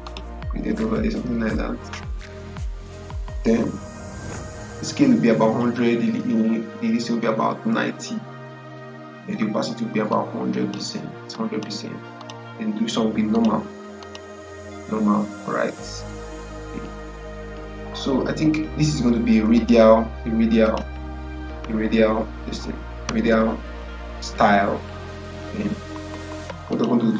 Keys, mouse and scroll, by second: 10.0 click, 19.4 click, 26.6 click.